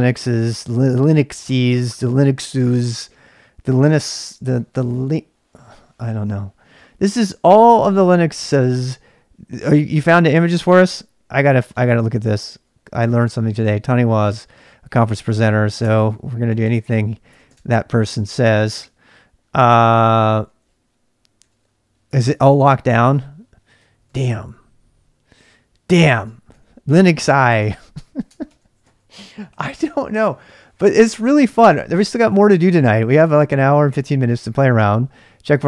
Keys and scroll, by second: 10.9 ctrl+c, 11.3-13.2 typing, 14.2-28.8 typing, 18.7 Tab, 28.3 ctrl+[, 29.5 Return, 32.9 typing.